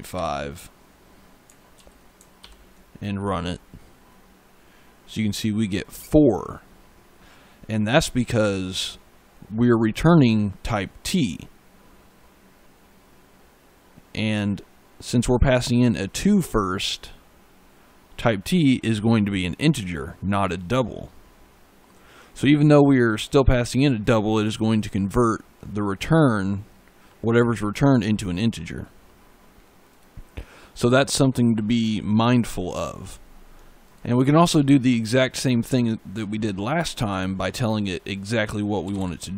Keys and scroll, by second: 0.0 5, 1.6 ctrl+s, 2.3 ctrl+F5, 8.3 e, 38.5-39.3 typing.